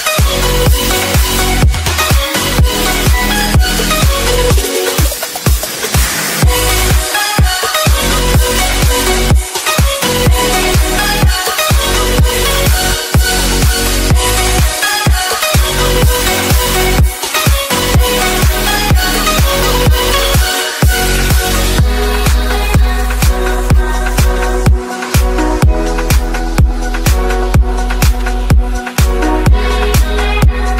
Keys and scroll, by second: 3.7 ctrl+a, 27.7 ctrl+space.